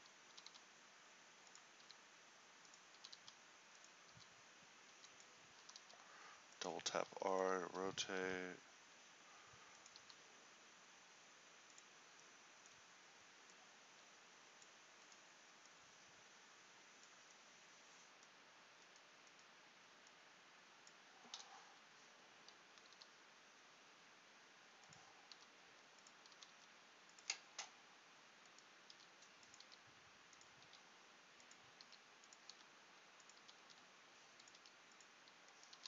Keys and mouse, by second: 0.4 r, 2.0 g, 3.1 r, 4.2 r, 10.2 r, 10.2 g, 13.7-21.6 drag, 23.1 g, 25.5 r, 26.4 r, 29.6 r, 29.8 g, 30.8 r, 32.0 g, 32.6 r, 33.5 r, 34.7 g.